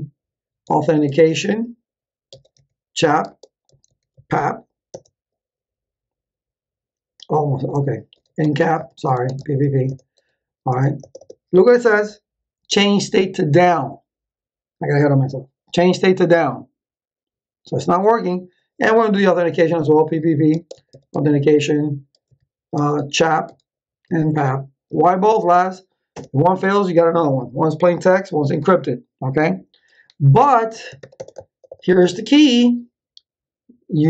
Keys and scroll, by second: 0.6 a, 0.8 u, 1.0 Tab, 2.0-4.6 typing, 4.9 Return, 7.9-9.3 typing, 9.8 Return, 19.1 p, 20.5-25.5 typing, 24.4 Tab, 26.1 Return, 30.3-31.5 typing.